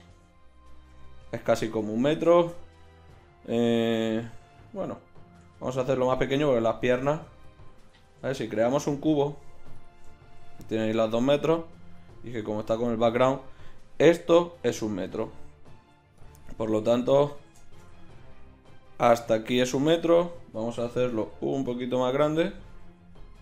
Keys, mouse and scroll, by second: 1.7-5.1 middle drag, 5.5 s, 6.9 g, 7.9 Tab, 8.5 shift+a, 10.1 middle click, 15.8 x, 16.7-20.7 right drag, 20.7 Tab, 21.3 s, 22.8 s.